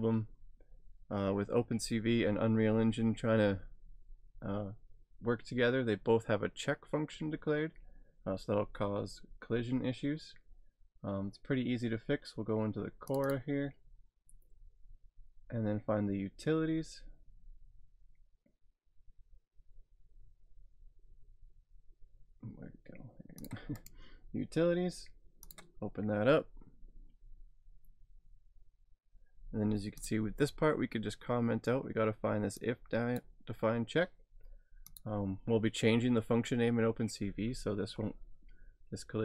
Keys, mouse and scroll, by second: 2.0-3.4 scroll down 3, 13.1 click, 16.0 scroll down 3, 23.4 click, 23.8 right click, 25.4 right click, 25.5 click, 30.0 click, 32.7 click, 34.8 click.